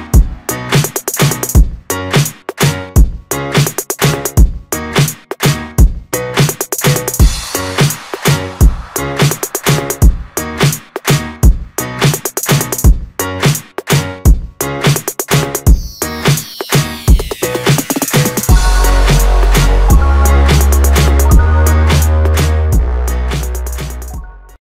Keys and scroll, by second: 7.2 ctrl+s.